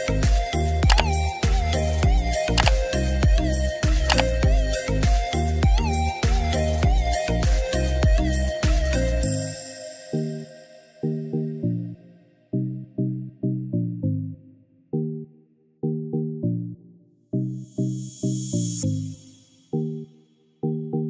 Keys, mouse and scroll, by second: 2.8 click, 13.7-20.5 drag.